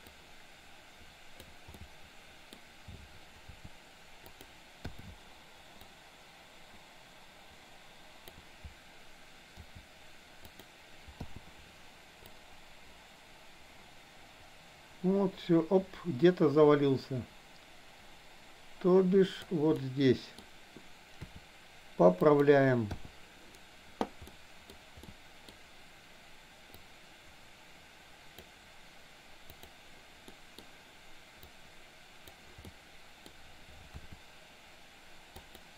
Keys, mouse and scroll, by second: 0.1-1.6 drag, 1.7 middle click, 3.4 r, 4.8 i, 5.9-8.4 drag, 9.6 r, 11.2 i, 12.3-19.4 drag, 19.7-20.4 middle drag, 21.3 r, 23.1 i, 24.3 middle click, 25.1 middle click, 26.8-28.4 drag, 29.6 drag, 30.3 middle drag, 31.6-32.4 drag, 32.6 middle click, 34.1 r.